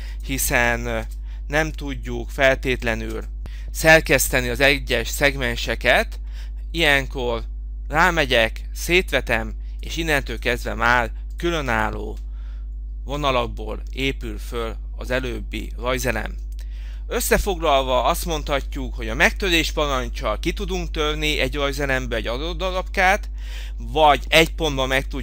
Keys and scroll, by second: 0.4 z, 1.1 Return, 10.0 Escape.